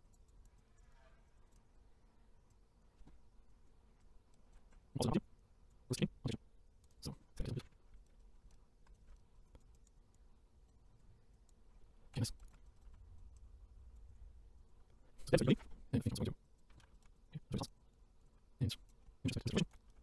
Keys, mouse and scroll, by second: 2.5-2.9 drag, 3.5 click, 4.0-5.4 shift+right drag, 5.4-5.7 drag, 6.0 click, 6.6 click, 7.5 ctrl+z, 7.9-10.2 shift+right drag, 10.2 click, 11.5 click, 13.4-13.7 drag, 14.1 click, 14.6 click, 15.0-15.4 scroll down 1, 15.8-16.1 scroll up 1, 16.1 scroll down 1, 16.4-16.8 drag, 16.8 ctrl+z, 16.9 shift+right click, 17.1-18.6 drag, 18.9 click, 19.0 scroll down 6, 19.5 click, 19.6-20.0 shift+right drag.